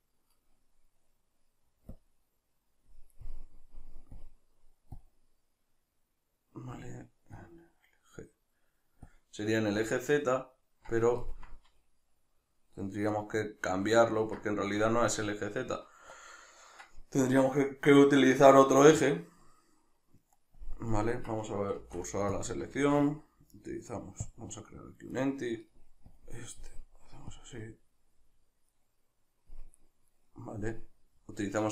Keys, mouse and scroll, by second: 3.2-4.2 middle drag, 4.2-11.2 drag, 11.2-25.2 ctrl+middle drag, 21.7 shift+s, 25.2 right click, 26.1-28.7 drag, 28.7 right click, 29.8 right click.